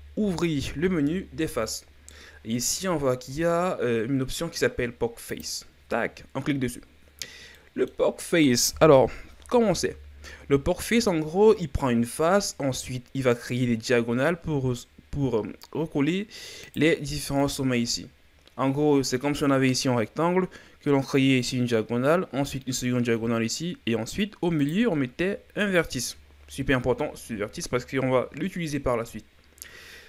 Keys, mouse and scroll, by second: 7.5-9.0 middle drag, 9.0 KP_1, 10.3-13.6 scroll up 5, 16.7 right click, 17.4 right click, 24.6 right click.